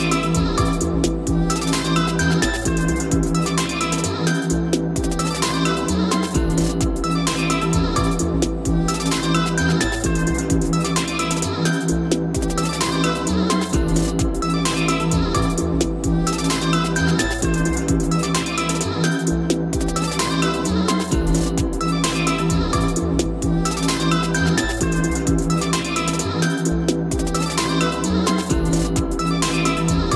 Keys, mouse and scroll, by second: 1.2-2.2 drag, 5.4 2, 6.3 BackSpace, 6.9 3, 8.2-10.7 typing, 10.8 Return, 12.0-12.7 scroll down 5, 12.7-13.9 scroll up 9, 13.9 p, 15.1 click, 15.2-16.0 typing, 17.2-18.2 scroll, 18.7 click, 18.9 click, 19.1 right click, 20.3 click, 22.0 click, 24.4 m, 27.1-28.3 drag, 28.3-28.7 typing, 28.9 Return.